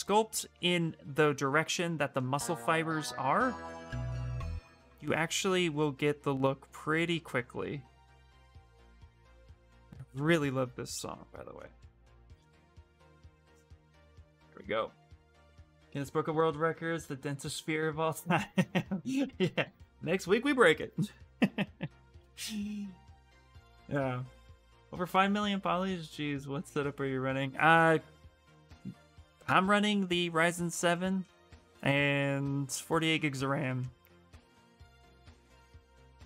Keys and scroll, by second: 9.2 s.